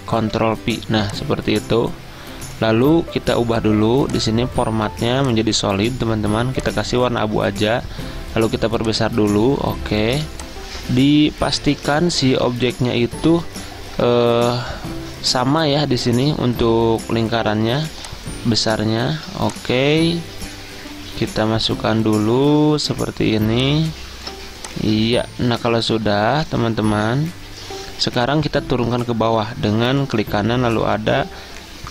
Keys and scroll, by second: 0.3 ctrl+v.